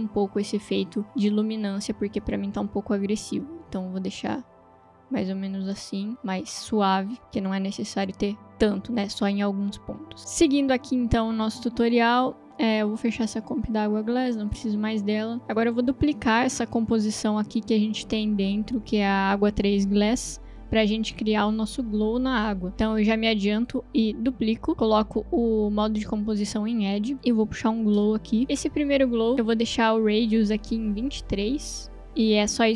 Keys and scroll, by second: 21.1 ctrl+d, 28.1 ctrl+space, 30.9-31.7 typing.